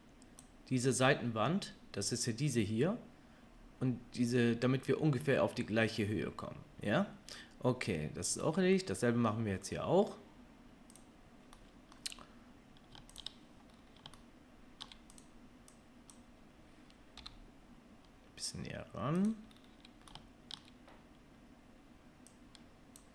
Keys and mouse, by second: 0.1-11.0 drag, 11.0-13.1 middle drag, 13.1 shift+click, 13.2-15.1 shift+middle drag, 15.1 click, 15.2-15.7 middle drag, 15.7-19.2 drag, 17.2 g, 19.2-22.3 middle drag, 22.3 click.